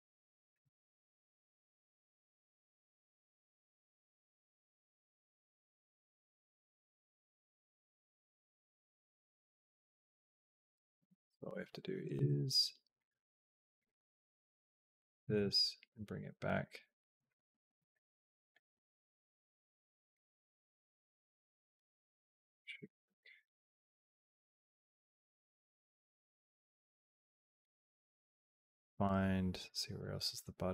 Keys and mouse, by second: 0.1 click, 0.6 click, 1.3 middle click, 2.7-10.6 drag, 12.0 Up, 13.6 click, 14.8 g, 17.7 click, 18.5 g, 20.2 middle click, 20.3 click, 20.4-21.6 middle drag, 23.5-27.5 drag, 28.2 click, 29.5 middle click, 30.6 click.